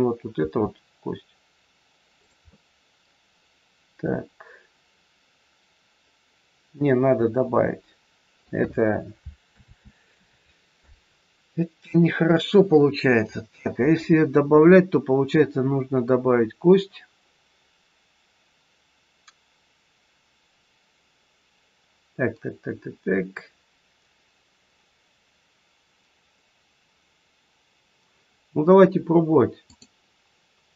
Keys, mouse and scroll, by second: 0.4 r, 2.4 middle click, 9.4 ctrl+z, 29.5 click.